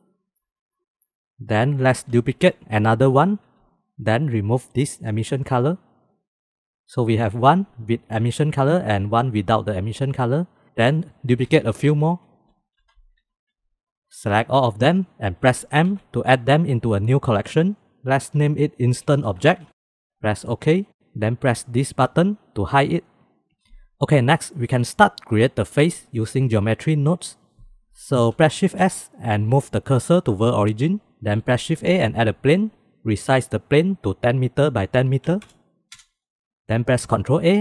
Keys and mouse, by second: 0.0-0.3 middle drag, 0.7 middle drag, 2.3 shift+d, 4.8 click, 6.3 click, 9.8-10.2 drag, 11.2 shift+d, 12.6 shift+d, 14.1 click, 15.1 m, 23.0 click, 28.7 shift+s, 31.7 shift+a, 35.9 click, 37.4 ctrl+a.